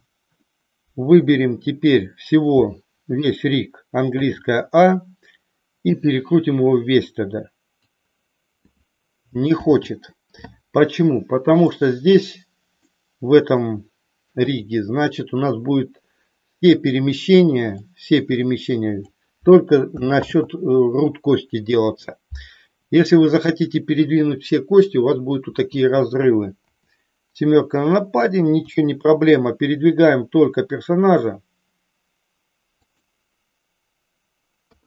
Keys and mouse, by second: 4.1 a, 5.9-7.9 drag, 9.6 ctrl+z, 12.9 middle click, 14.4 click, 17.7-19.0 drag, 20.1 ctrl+z, 26.5 KP_7, 28.6 r, 32.9 click, 34.7 KP_3.